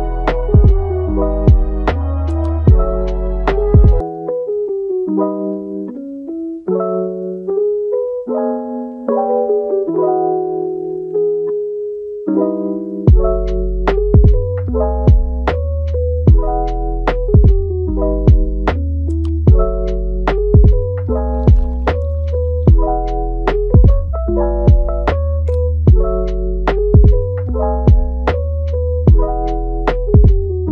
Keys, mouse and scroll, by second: 2.6 scroll down 3, 2.8 middle click, 3.3 scroll up 3, 3.6-6.0 middle drag, 6.0 click, 6.3 scroll down 2, 6.5-7.5 middle drag, 7.5 ctrl+z, 8.5 middle click, 9.0-9.7 scroll up 1, 9.7-11.5 drag, 11.5-12.5 middle drag, 12.5 click, 13.2 middle click, 13.7-17.9 drag, 17.9 middle click, 18.5-19.6 drag, 19.6-21.0 middle drag, 21.0 click, 21.8 scroll down 1, 22.1 middle click, 22.6 click, 22.9 middle click, 23.4 click, 23.8 middle click, 24.2 click, 24.9 middle click, 25.3-27.1 drag, 27.1 middle click, 27.5 click, 28.1 middle click, 28.5 click, 28.7-30.3 middle drag, 30.3-30.7 drag.